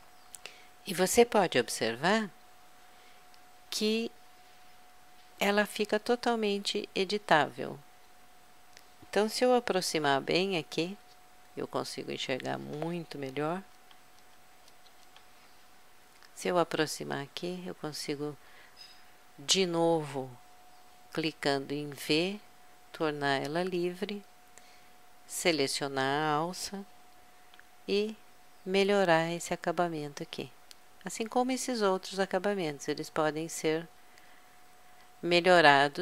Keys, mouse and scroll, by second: 2.2 middle click, 2.6 middle click, 6.3-10.2 middle drag, 10.2 KP_Add, 11.4 middle click, 11.9-13.8 drag, 13.8 KP_Add, 14.3 KP_Add, 14.7 KP_Add, 15.1 KP_Add, 18.0 click, 19.5 click, 22.0 v, 25.5-27.2 drag, 27.5 g, 30.2-32.0 drag, 33.0-34.8 drag.